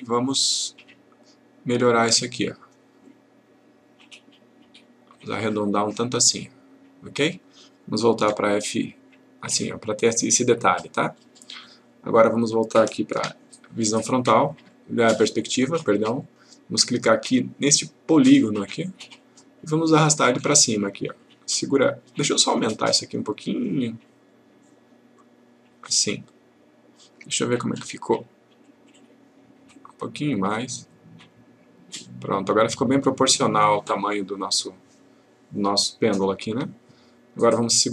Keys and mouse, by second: 8.2 F3, 13.2 F1, 14.7-15.6 click, 18.1 click, 22.9 click, 27.8 F3, 30.5-34.5 click, 36.5 F1.